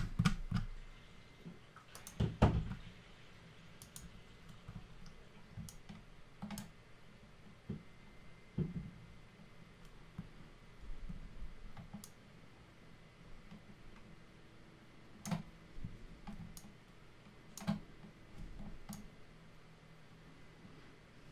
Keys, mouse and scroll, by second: 2.0 click, 3.8 click, 5.7 alt+click, 12.0 alt+click, 16.6 alt+click, 19.0 alt+click.